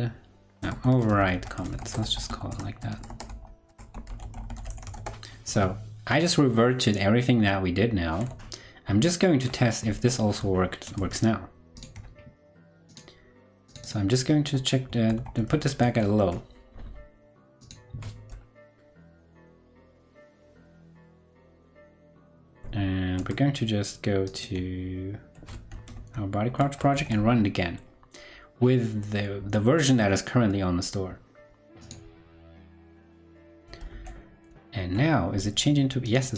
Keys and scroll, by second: 9.3 ctrl+Left, 10.9 super+Tab, 15.8 super+s, 20.3 ctrl+Right, 21.2 ctrl+Right, 21.2 ctrl+Left, 22.3 ctrl+Left, 22.3 ctrl+Right, 23.1 super+Tab, 24.7 super+Tab, 26.4 ctrl+Right, 26.9 super+r, 34.4 ctrl+Left, 35.0 ctrl+Left.